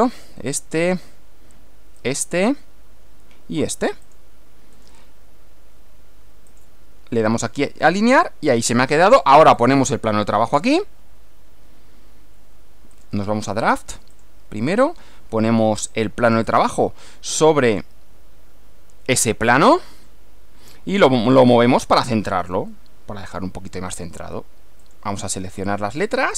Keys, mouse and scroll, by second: 0.0 click, 2.0 click, 4.2 click, 4.8-6.6 right drag, 6.6 click, 9.6 click, 13.0 click, 14.2 click, 16.6 click, 17.8 click, 21.4-22.4 middle drag, 22.8 middle click, 24.8 click.